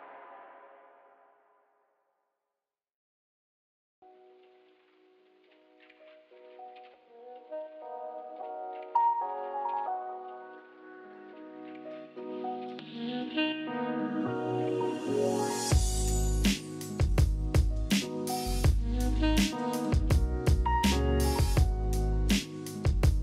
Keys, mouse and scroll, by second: 0.0-0.5 scroll, 1.6 click, 1.7 click, 2.3 click, 2.3 9, 2.6 click, 3.7 click, 3.9 g, 6.6 click, 8.3 click, 13.4 click, 17.2 click, 19.3 click, 21.3 click, 22.3 click.